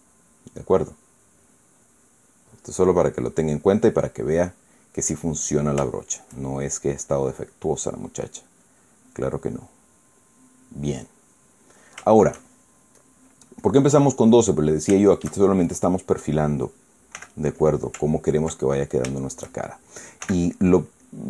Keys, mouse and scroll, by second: 0.4-2.9 middle drag, 3.4 click, 4.4-6.5 middle drag, 6.7-7.7 shift+middle drag, 8.0 middle click, 8.4 middle click, 9.3 click, 10.2 click, 10.9 click, 11.8 middle click, 12.8 shift+middle click, 13.7 click, 14.3 click, 15.0-17.6 middle drag, 17.9 f, 18.3 click, 19.4-20.8 ctrl+middle drag, 20.9 shift+f.